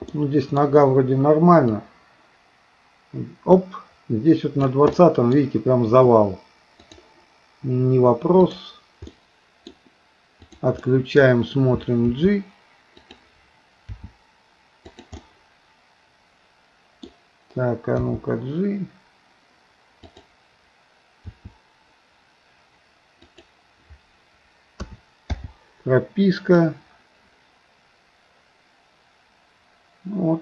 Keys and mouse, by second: 0.1 middle click, 1.8-4.8 drag, 4.9 middle click, 6.9-9.1 drag, 9.1 middle click, 10.5 click, 10.8 middle click, 12.1 g, 13.9 r, 15.1-17.1 middle drag, 18.1 g, 21.2 r, 24.9 a, 25.4 i, 26.6-30.4 drag.